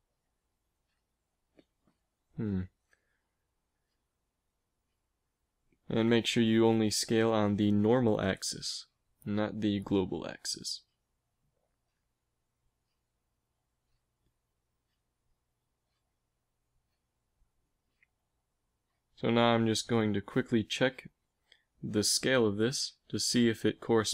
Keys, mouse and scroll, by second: 0.1 s, 3.5 ctrl+z, 5.2 ctrl+z, 5.2 s, 9.3 s, 13.1 s, 17.4 KP_1, 20.9 shift+d.